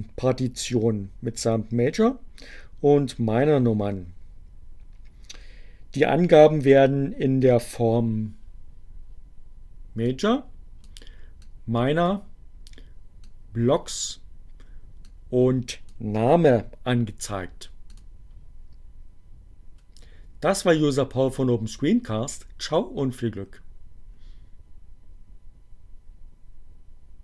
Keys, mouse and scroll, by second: 9.9 click, 11.2 click, 13.1 click, 14.9 click, 17.7 click.